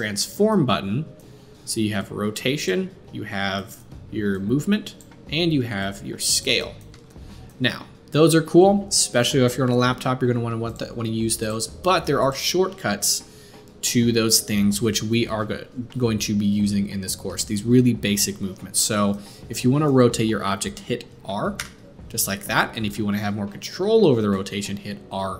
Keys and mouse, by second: 6.9 ctrl+z, 10.7 middle click, 11.4-12.3 drag, 12.3-25.3 middle drag, 21.5 r.